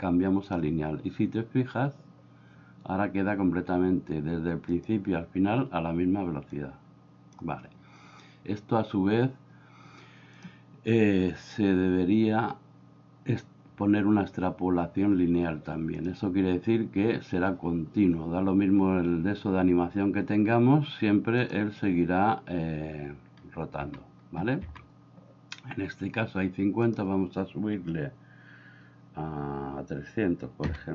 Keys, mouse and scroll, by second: 4.8 click, 6.6 click, 10.3-16.1 drag, 21.5 click, 23.9 Escape, 24.7 Escape, 26.9-30.9 drag.